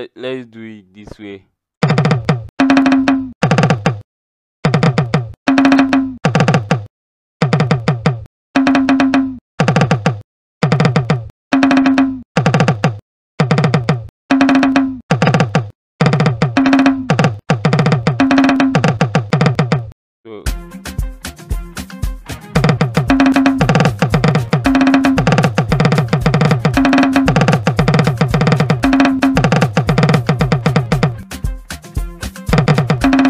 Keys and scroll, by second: 1.8 KP_0, 2.5 KP_5, 3.0 KP_6, 3.3 KP_2, 4.6-7.4 typing, 8.5-19.4 typing, 22.5 KP_0, 23.2 KP_5, 23.2 KP_6, 24.2-30.8 typing, 32.6-33.2 typing.